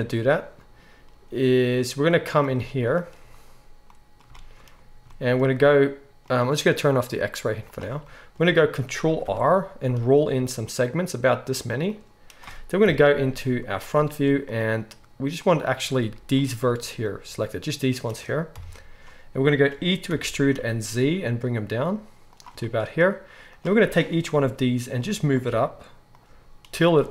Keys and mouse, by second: 7.6-11.9 drag, 9.2 ctrl+r, 11.9-25.4 middle drag, 12.8 KP_1, 18.5 KP_1, 20.1 e, 24.3 g, 25.4 click, 25.4-27.1 middle drag, 25.4 g.